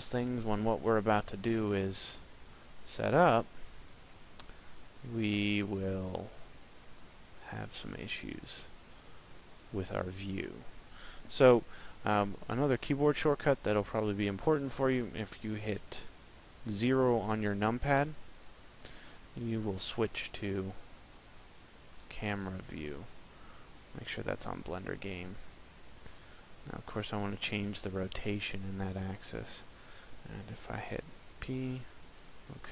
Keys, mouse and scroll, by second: 17.7 KP_0, 21.8 click, 22.9 click, 25.9 click, 26.1 click, 26.3 click, 26.5 click, 26.7 click, 26.8 click, 27.0 click, 27.2 click, 27.4 click, 27.5 click, 27.7 click, 27.9 click, 28.1 click, 28.3 click, 28.4 click, 28.6 click, 28.8 click, 29.0 click, 30.7 p, 32.3 p.